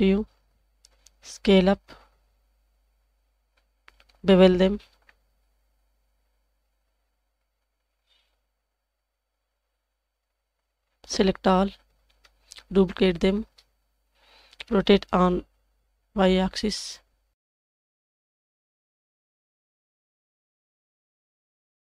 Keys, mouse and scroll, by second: 1.4 s, 4.7 ctrl+shift+b, 11.6 l, 13.4 shift+d, 14.9 r, 18.4 g, 21.3 middle click.